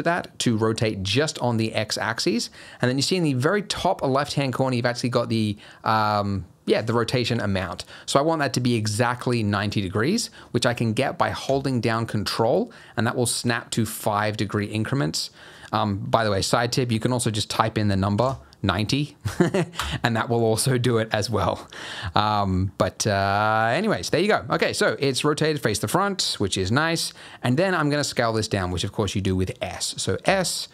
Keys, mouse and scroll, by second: 21.6 scroll up 1, 21.8 middle click, 22.1 scroll down 1, 22.3 scroll up 2, 22.4 scroll down 1, 22.6-23.3 scroll up 4, 23.3 middle click, 23.9-24.6 scroll down 3, 24.6 middle click, 25.6 middle click, 26.6 scroll up 3, 26.9 middle click, 27.2 scroll down 2, 27.5 middle click, 30.2 s.